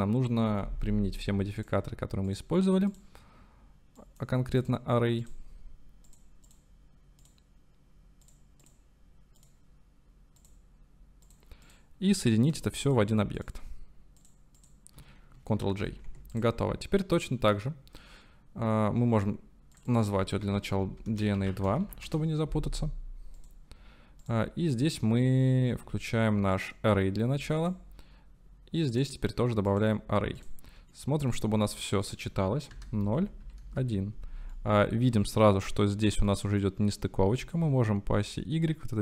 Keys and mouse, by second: 1.7 click, 3.0-4.7 drag, 5.2 click, 6.1 click, 7.2 click, 8.3 click, 9.4-11.3 drag, 14.2-14.6 shift+drag, 15.8 ctrl+j, 16.7-17.6 drag, 19.7-22.7 drag, 23.4 click, 24.2-26.7 drag, 27.6-29.0 drag, 29.9-30.4 drag, 30.9-31.3 shift+middle drag, 32.2-34.2 drag, 34.6 shift+click, 34.9 shift+middle click, 36.3 middle click, 37.5-39.0 shift+drag.